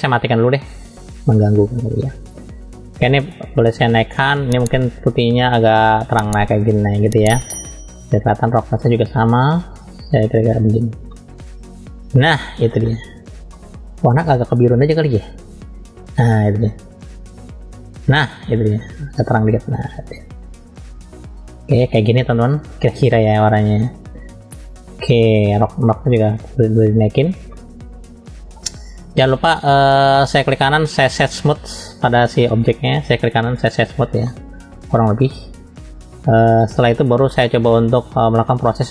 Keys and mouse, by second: 0.4-1.6 drag, 1.8 middle click, 3.4 click, 8.5-10.8 drag, 11.1-12.1 middle drag, 12.4 shift+middle click, 13.5 shift+middle click, 14.4 click, 23.4-25.4 middle drag, 26.2-27.2 drag, 27.5 middle click, 29.4-30.5 drag, 30.5-32.3 right drag, 33.2 right click, 34.2-35.1 middle drag, 37.3-38.0 middle drag, 38.4-38.9 middle drag.